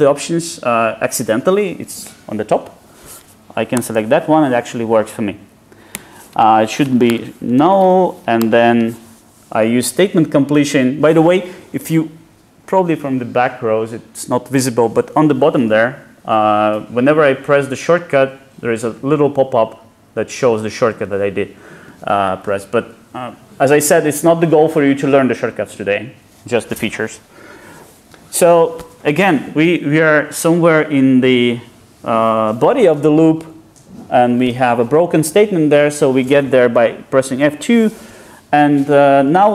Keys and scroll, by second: 3.8 Return, 8.5 ctrl+shift+super+Return.